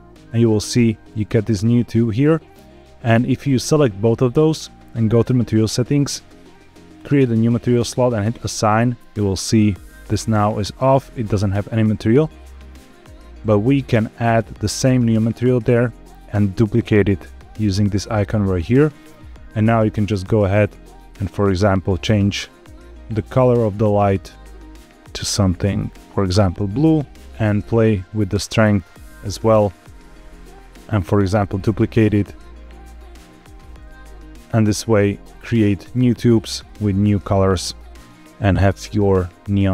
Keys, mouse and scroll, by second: 0.1 click, 0.8 click, 1.2 g, 1.5 x, 2.0 click, 3.1 shift+click, 5.1 click, 6.9 click, 8.3 click, 13.8-15.5 drag, 16.6 click, 19.0 Tab, 20.2 click, 27.2 click, 31.0 shift+d, 31.3 z, 33.1 click, 34.2 scroll down 1, 34.7 shift+middle click, 35.5 Tab, 36.6 click, 37.8-38.5 scroll up 2.